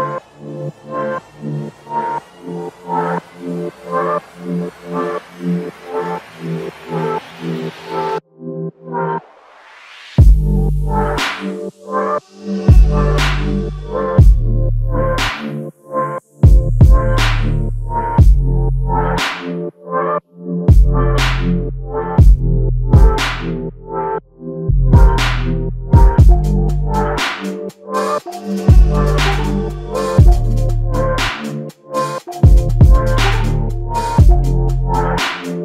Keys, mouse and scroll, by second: 0.0 double click, 4.9 double click, 19.4 alt+click.